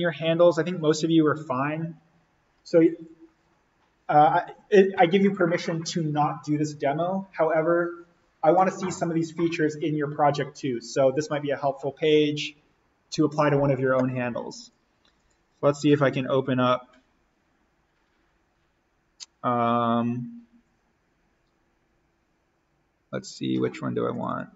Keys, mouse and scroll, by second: 14.6 click, 24.1 click.